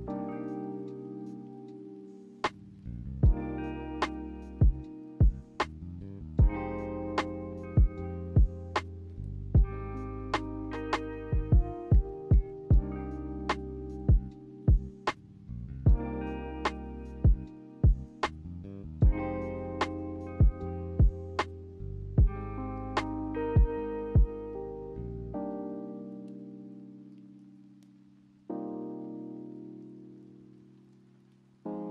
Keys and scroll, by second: 27.5 v, 30.0 ctrl+z.